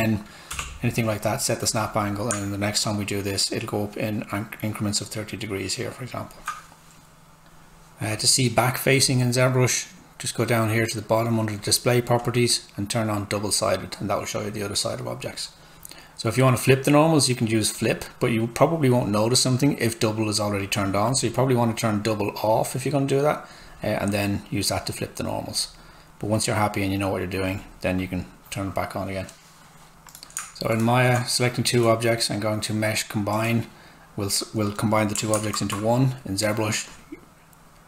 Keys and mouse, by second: 0.5 Return, 1.1 click, 17.7 click, 35.7 alt+Tab, 36.9 click.